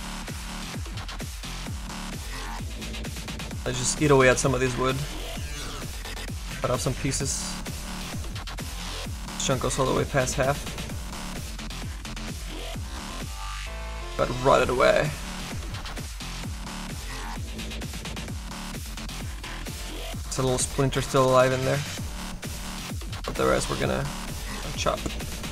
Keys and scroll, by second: 2.9 s.